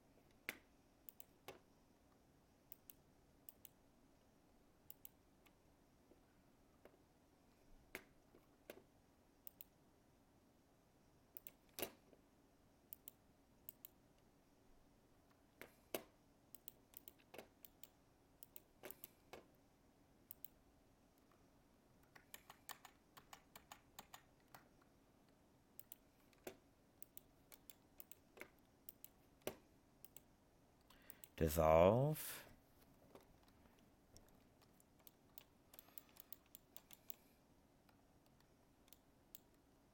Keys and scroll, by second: 22.3 ctrl+z.